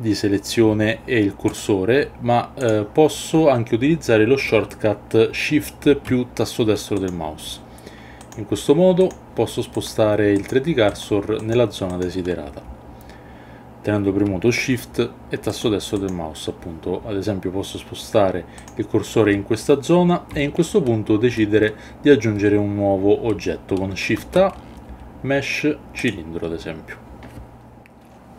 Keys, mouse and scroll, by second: 1.5 right click, 7.0 shift+right click, 8.2 shift+right click, 9.0 shift+right click, 9.7 shift+right click, 10.4 shift+right click, 10.9 shift+right click, 11.4 shift+right drag, 11.9 shift+right click, 15.5 shift+right click, 15.9 shift+right click, 18.6 shift+right click, 24.2 shift+a.